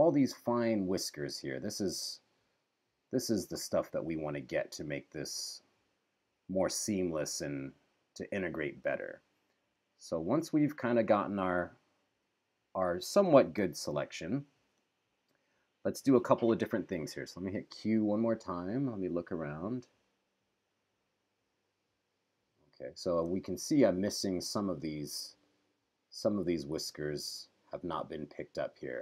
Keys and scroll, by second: 13.9 super+-, 16.6 q, 23.9 super+=, 26.9 q.